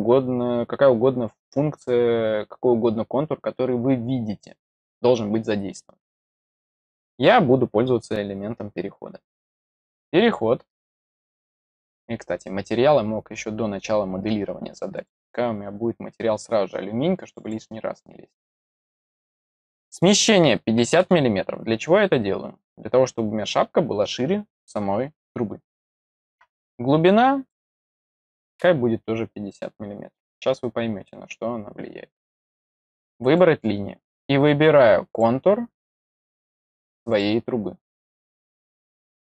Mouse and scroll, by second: 10.1 click, 14.9 click, 17.2 click, 17.3 click, 19.5 click, 27.0 click, 33.2 click, 35.0 click, 36.0 click, 37.0 click, 38.5 click, 39.1 scroll up 2.